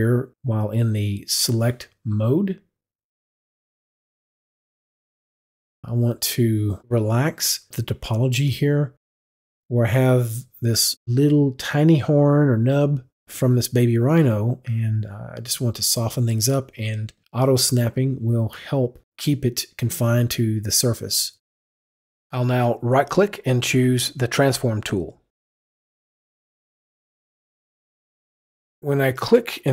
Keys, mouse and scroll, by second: 18.1 click, 23.7 F9, 23.9 right click, 25.7 click, 26.9 click, 29.0 click.